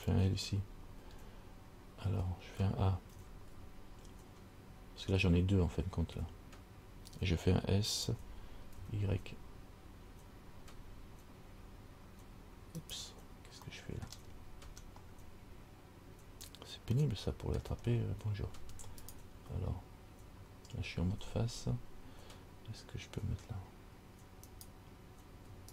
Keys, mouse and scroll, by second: 0.7 l, 1.2 l, 3.3 a, 3.8 a, 5.3-6.9 scroll down 1, 8.2 s, 13.9 middle click, 14.5-17.0 scroll up 6, 17.2 shift+middle click, 18.0 scroll down 4, 19.3 alt+right click, 24.7 right click.